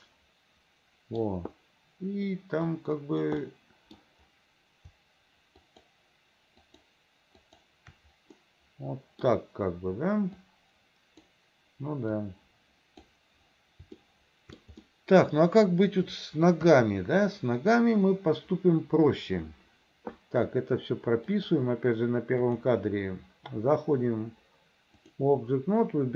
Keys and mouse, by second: 1.3-2.8 middle drag, 2.8 click, 3.6-5.1 middle drag, 5.7 shift+click, 8.5 middle click, 10.5 click, 12.3 click, 14.1 shift+click, 14.9 middle click, 16.7 KP_3, 21.4 middle click, 22.7-23.8 middle drag, 23.8-25.3 drag.